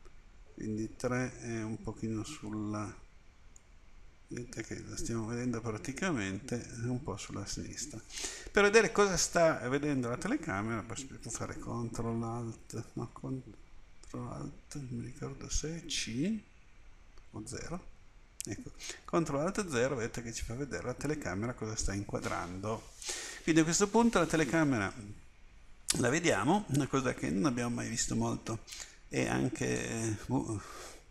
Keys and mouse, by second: 0.0 KP_3, 3.6-5.4 middle drag, 18.0 ctrl+alt+KP_0, 29.6-31.1 drag.